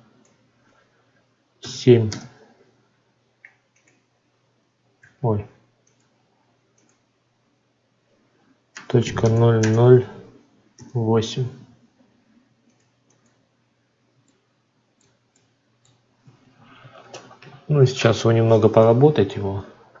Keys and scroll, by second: 2.0 Return, 4.9 ctrl+z.